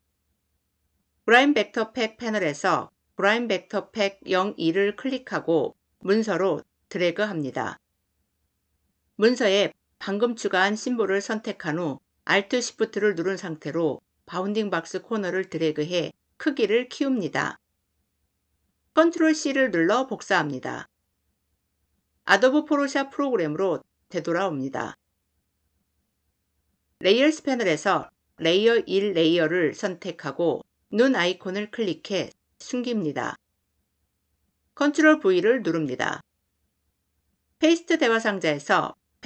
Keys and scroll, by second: 19.0 ctrl+c, 34.7 ctrl+v.